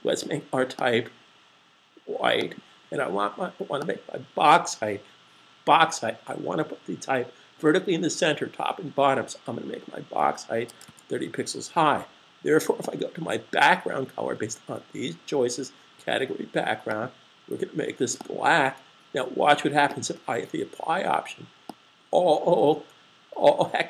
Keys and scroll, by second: 9.2-10.1 typing.